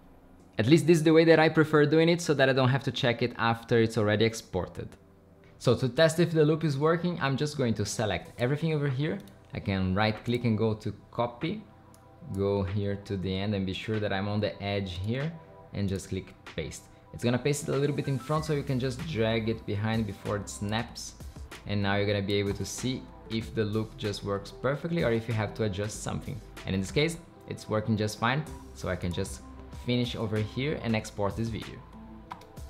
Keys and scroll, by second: 22.5 BackSpace, 22.7 space.